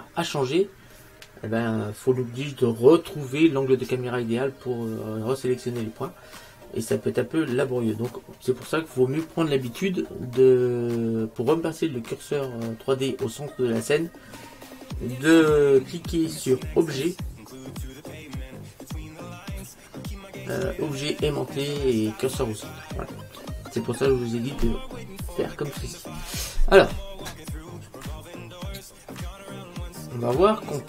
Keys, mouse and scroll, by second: 27.8-28.8 scroll down 1, 28.8-30.7 middle drag.